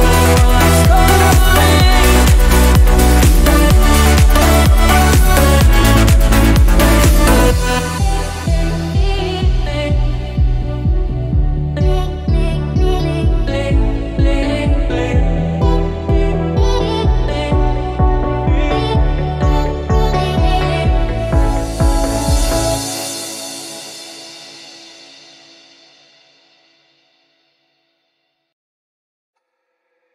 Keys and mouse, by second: 3.0-15.7 drag, 17.2-18.2 drag, 19.1-24.0 shift+middle drag, 24.0 click, 24.9 click, 26.5 click, 27.6 a, 29.7-30.1 right drag.